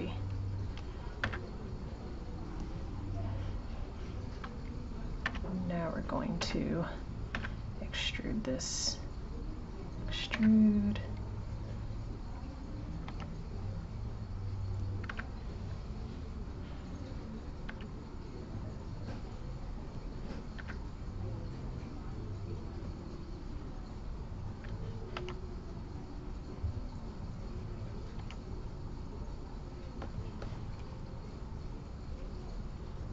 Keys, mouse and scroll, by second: 0.0 click, 0.5 click, 1.2 1, 1.6 click, 24.0 click, 27.6 click, 31.5-32.0 shift+scroll down 1.